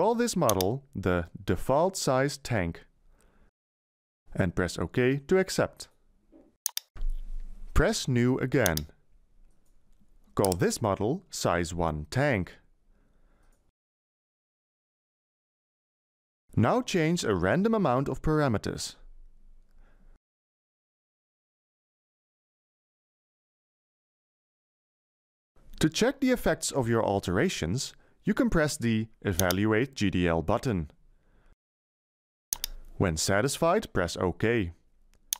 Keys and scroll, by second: 1.4-4.0 typing, 11.7-12.8 typing, 14.0 space, 14.4 t, 14.5 a, 14.8 n, 19.9 1, 20.1 5, 20.4 0, 20.7 0.